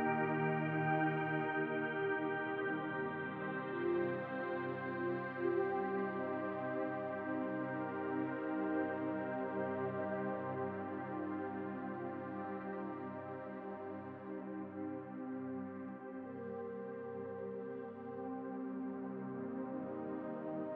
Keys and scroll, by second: 0.3 s, 0.7 b, 3.3 ctrl+z, 3.4 b, 4.0 s, 11.0 b, 11.9 s, 14.6 b, 15.1 s, 16.6 s, 17.8 s, 18.7 b, 19.3 s, 20.3 s.